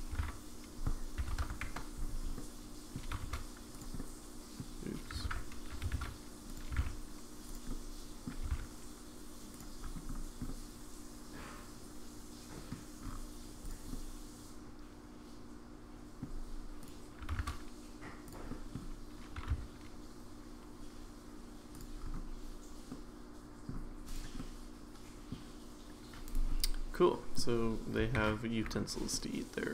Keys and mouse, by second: 0.1 r, 2.3 middle click, 3.1 g, 4.0-4.6 middle drag, 5.2 ctrl+z, 5.7 g, 6.7 g, 7.7 middle click, 9.8 g, 10.5-12.7 middle drag, 13.7 drag, 13.9-16.2 middle drag, 17.2 g, 18.5 middle click, 19.4 r, 22.9-23.7 middle drag, 24.4-25.3 middle drag, 27.1 middle drag, 28.2 ctrl+s, 29.1-29.7 middle drag.